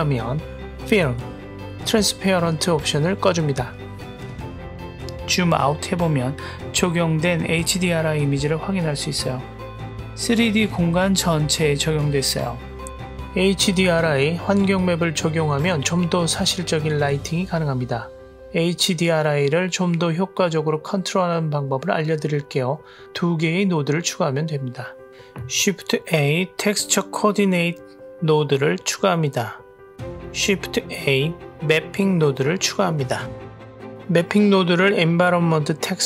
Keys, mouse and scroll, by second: 0.6 click, 0.9-4.0 scroll down 1, 4.0 click, 4.9-5.3 scroll down 1, 5.7-7.2 middle drag, 7.4-8.2 scroll down 1, 8.2 middle drag, 8.6 middle click, 8.9 middle click, 9.1 middle click, 9.4 middle click, 9.7 middle click, 10.0 middle drag, 10.5 middle click, 10.8 middle drag, 11.0 middle drag, 11.3 middle click, 11.6 middle click, 11.9-13.1 middle drag, 13.1-15.3 scroll up 1, 15.3-16.8 drag, 17.8 click, 18.9-19.5 drag, 20.0-22.5 drag, 22.8 click, 24.4 shift+a, 30.0 middle click, 30.2 click, 30.3 shift+a, 32.5 p.